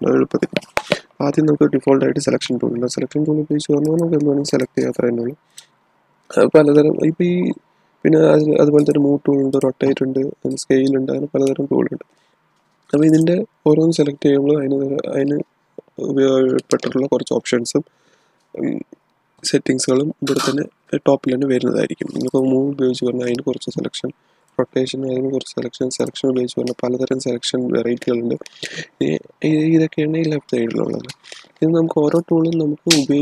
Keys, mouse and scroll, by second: 7.5 click, 8.7 click, 13.0 click, 22.6 click, 24.3 click.